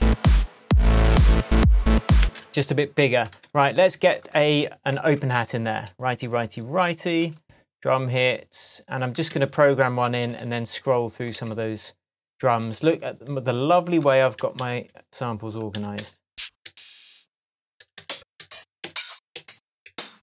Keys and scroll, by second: 2.2 space, 5.1 shift+Tab, 9.2 Left, 12.6 Up, 14.3 Down, 15.7 Right, 17.7 Right.